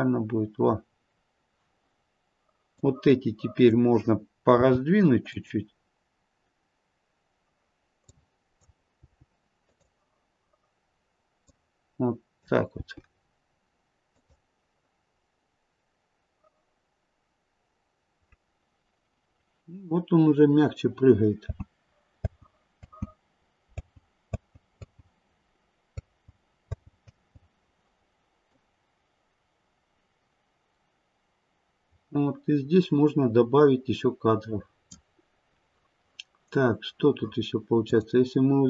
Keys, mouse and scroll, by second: 2.7 click, 4.4 g, 8.0 click, 9.0 g, 11.4 click, 12.7 g, 21.5 space, 22.2-25.9 space, 26.6 space, 28.5 click, 28.5 space, 37.9 click.